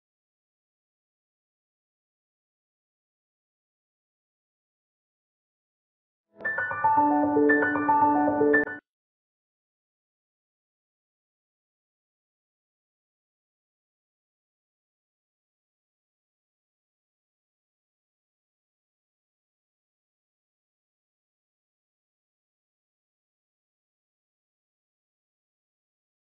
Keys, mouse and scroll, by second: 0.4 alt+click, 1.1 scroll down 1, 1.2 scroll up 1, 1.3 scroll down 1, 1.9 scroll up 1, 2.2 click, 2.3 scroll down 1, 2.4-2.9 scroll up 2, 2.6 click, 2.9 click, 3.6 click, 4.0 scroll down 1, 4.2 scroll up 1, 4.7 scroll down 1, 4.9 scroll up 1, 5.4 scroll down 1, 25.6 click.